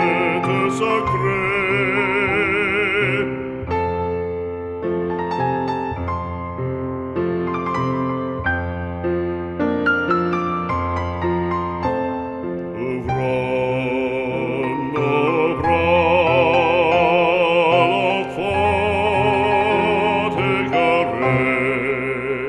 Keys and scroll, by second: 0.7 z.